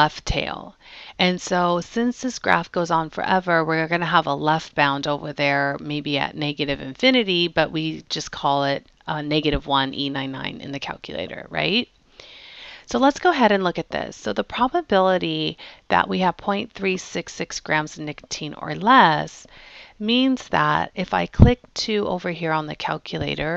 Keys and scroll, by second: 22.9 2.